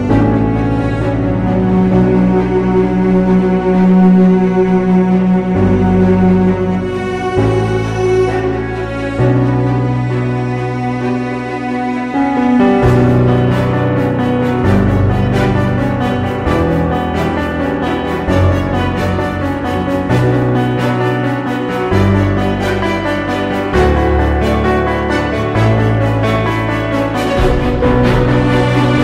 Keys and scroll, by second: 0.7 x, 1.5 x, 3.8 ctrl+0, 4.1 ctrl+s, 6.3 ctrl+t, 9.5 ctrl+0, 16.5 [, 19.5 ], 19.9 ], 22.5 [.